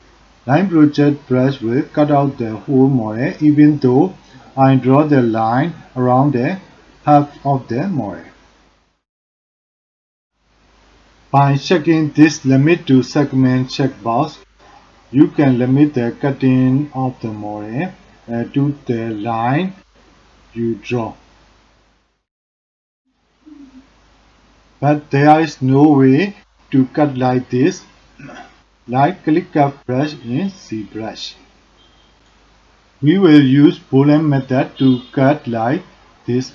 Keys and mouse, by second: 0.0 ctrl+z, 0.8-8.5 drag, 10.3 ctrl+z, 15.9-21.0 drag, 27.5-28.2 middle drag, 28.8 middle click, 29.6 middle click.